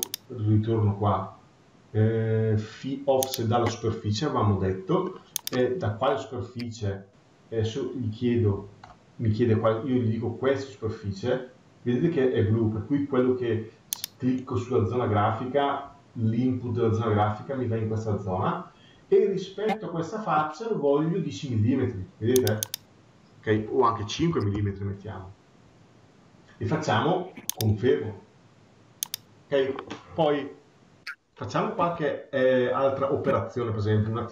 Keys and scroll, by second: 24.5 Return.